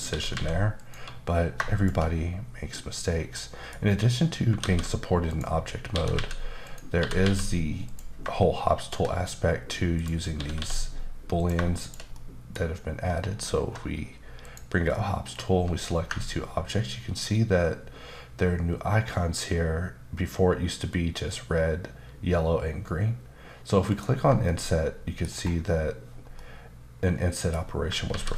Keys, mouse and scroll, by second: 0.1 typing, 0.8 click, 1.7 shift+click, 3.3 middle click, 4.6 alt+w, 5.3 click, 5.9-7.2 typing, 6.6 click, 7.9 click, 8.8 shift+click, 10.3 click, 10.4 typing, 11.4 click, 11.8 shift+click, 12.1 middle click, 14.4 click, 23.9 ctrl+click, 24.4 middle click, 25.3-26.3 scroll up 2, 26.3 middle click, 28.1 ctrl+z.